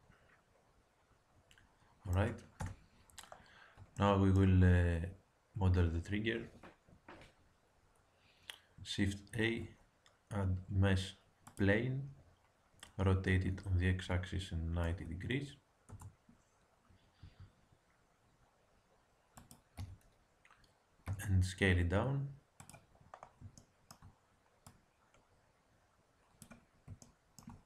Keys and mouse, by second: 2.5 KP_1, 9.3 shift+a, 13.4 r, 17.2 g, 19.7 z, 21.0 s, 24.6-26.4 drag.